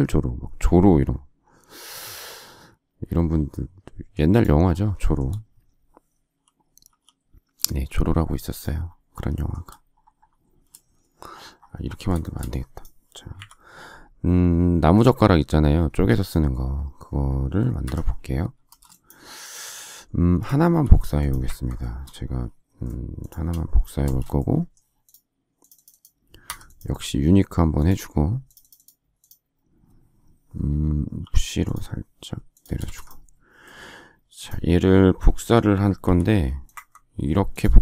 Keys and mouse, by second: 6.8 m, 10.6 shift+space, 13.3 shift+Delete, 17.8 Escape, 18.6 space, 20.6 m, 23.9 shift+space, 26.4 Escape, 31.1 p, 32.6 space, 32.7 Escape, 35.9 m.